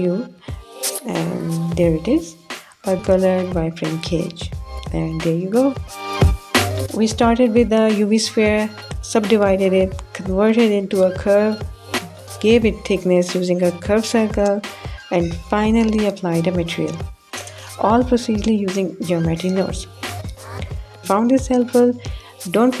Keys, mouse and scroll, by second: 3.2 click, 3.7 middle click, 4.0 click, 4.3 middle click, 5.5 middle drag, 5.7-6.2 drag, 5.7-6.2 right drag, 6.2 middle click.